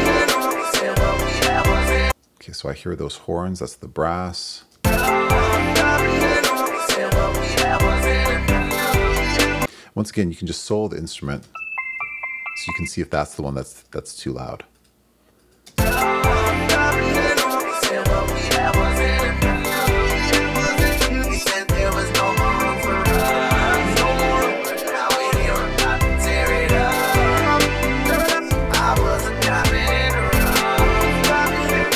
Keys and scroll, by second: 2.1 space, 4.7 space, 9.6 space, 15.7 space.